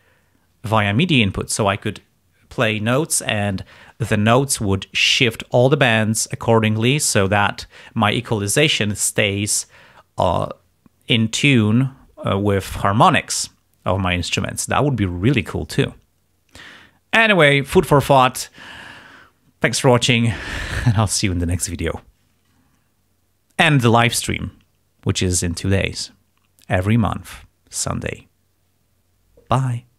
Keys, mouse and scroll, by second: 5.0 click, 6.4 click.